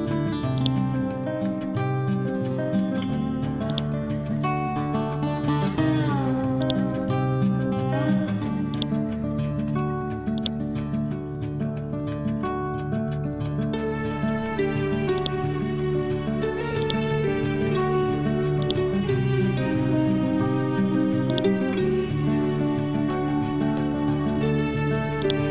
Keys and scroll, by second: 1.2 Down, 2.0 ctrl+Home, 6.7 ctrl+Home, 9.2 c, 17.1 Down.